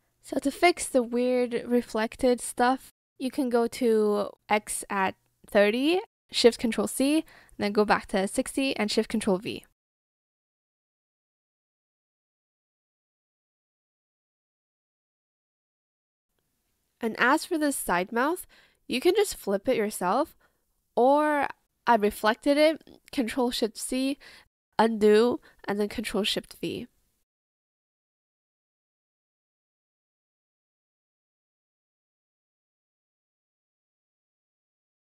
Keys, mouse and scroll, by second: 2.7 ctrl+shift+c, 3.7 ctrl+shift+v, 6.5 ctrl+shift+c, 7.1 ctrl+shift+v, 12.9 ctrl+click, 13.4 ctrl+shift+c, 13.7 ctrl+shift+v, 15.9 Return, 17.3 shift+click, 17.7 ctrl+shift+z, 19.9 ctrl+z, 24.3 ctrl+shift+c, 25.4 ctrl+z, 26.5 ctrl+shift+v, 29.0 shift+click.